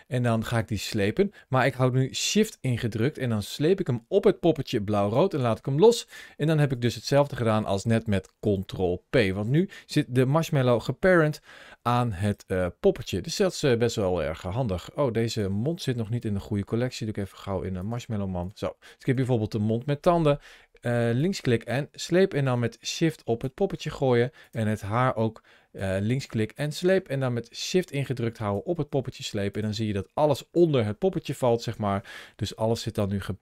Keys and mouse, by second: 0.5 click, 10.1 g, 12.0 right click, 15.1 click, 16.0 m, 21.0 click, 24.2 click, 25.6 click, 31.4 click.